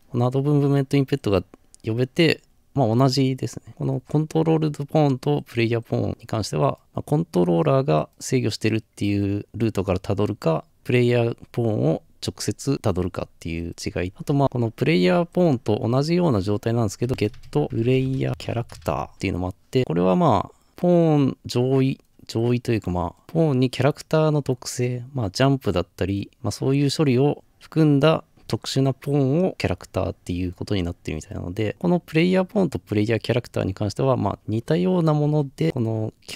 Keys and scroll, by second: 17.1-18.9 typing, 19.1 Return, 35.6 typing.